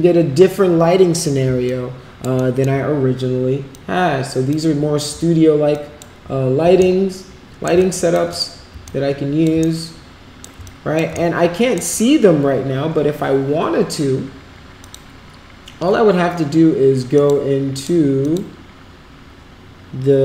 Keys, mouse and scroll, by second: 1.6 alt+click, 2.3 alt+middle click, 3.7 click, 5.7 alt+click, 6.7 shift+right click, 7.7 alt+click, 8.8 alt+click, 9.7 shift+right click, 10.6 alt+click, 11.1 shift+right click, 14.8 click, 17.1 click, 17.7 click, 18.2 click.